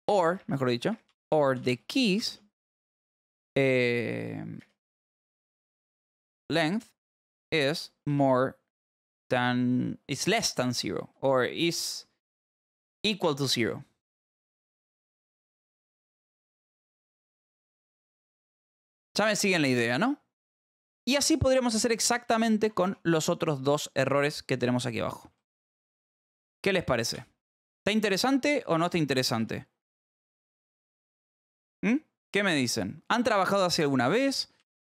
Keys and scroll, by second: 0.0-3.1 typing, 4.5-10.2 typing, 10.7 Left, 13.4 BackSpace, 14.4 Right, 15.2-18.6 typing, 19.4 ctrl+s, 21.9 j, 22.2 k, 23.4 j, 24.6 y, 25.1 j, 27.1 p, 28.9 j, 29.3 a, 30.2 Return, 30.5 Up, 31.0 Escape, 31.4 Up, 34.3-34.8 typing.